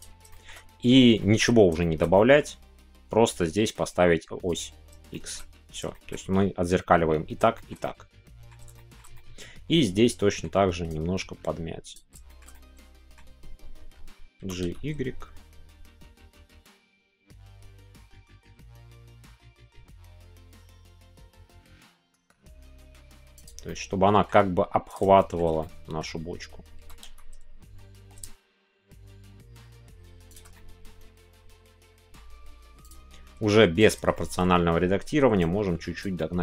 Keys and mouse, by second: 0.3 shift+middle click, 1.2 shift+middle click, 1.8 shift+middle click, 2.1-4.5 middle drag, 4.5 click, 5.1 shift+middle click, 5.9 shift+middle click, 7.5 shift+middle click, 8.8-10.4 shift+middle drag, 12.2 shift+middle click, 12.5 middle click, 23.4 click, 23.6-25.0 middle drag, 25.1 shift+middle click, 25.5 middle click, 30.3 shift+click, 30.5-32.1 middle drag, 33.8 click, 34.1-35.4 shift+middle drag, 35.4 click, 36.1-36.4 middle drag.